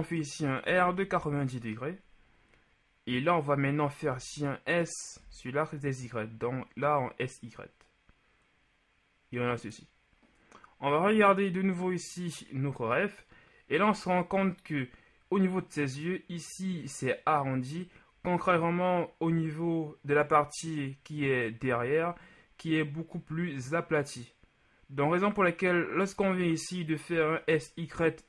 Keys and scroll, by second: 0.7 r, 0.9 KP_9, 1.1 KP_0, 1.4 Return, 4.1 s, 5.3 y.